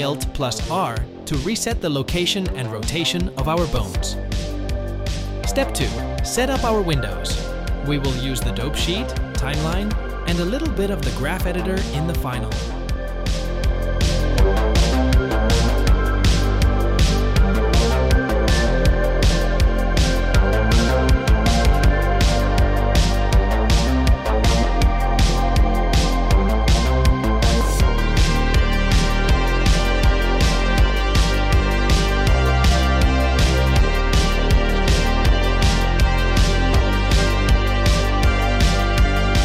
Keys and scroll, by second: 12.6 n, 18.2 n.